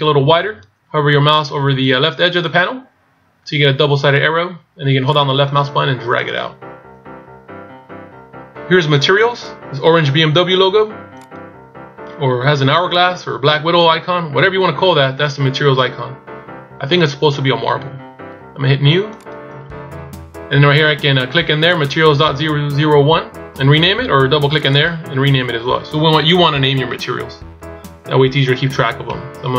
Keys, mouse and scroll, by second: 5.2 click, 11.3 click, 19.2 click, 21.9 click.